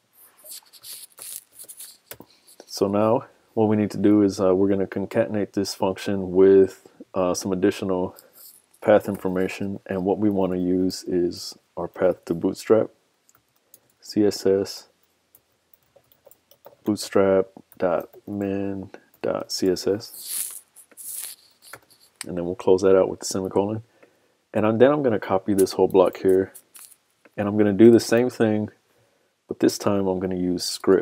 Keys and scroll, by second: 26.1 super+c, 28.2 super+v.